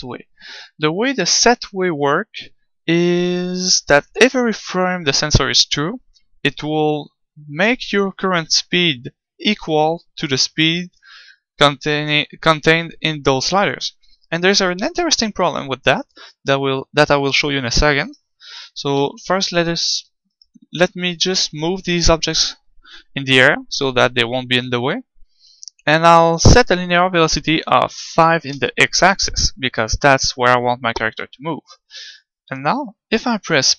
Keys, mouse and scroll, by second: 18.0-19.8 right drag, 19.1 g, 19.9-23.3 drag, 20.3-24.1 right drag, 20.9 g.